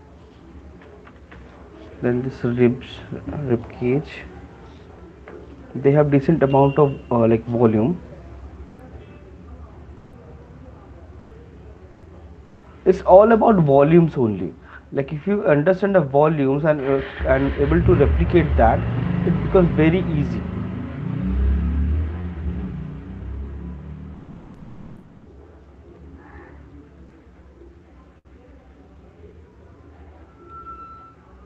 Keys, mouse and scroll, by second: 0.4 click, 1.4-2.4 typing, 3.6 typing, 5.3 alt+click, 5.9 ], 6.1 ], 7.3 click, 8.1 ], 8.8 [, 10.2 click, 12.0 click, 12.8 click, 14.8 click, 14.8 middle click, 17.2 click, 23.0 click, 23.8 click, 24.3 click, 24.7 click, 30.6-31.0 shift+click.